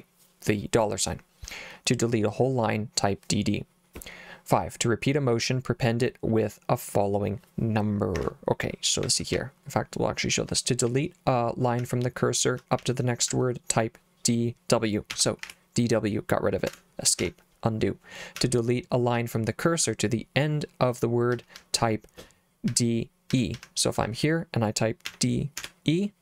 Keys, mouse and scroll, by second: 8.1 Escape, 9.0 j, 9.3 k, 10.9-13.8 typing, 15.1 d, 15.4 w, 17.2 u, 18.4 j, 19.1 h, 21.3 l, 21.6 l, 22.7-25.6 typing.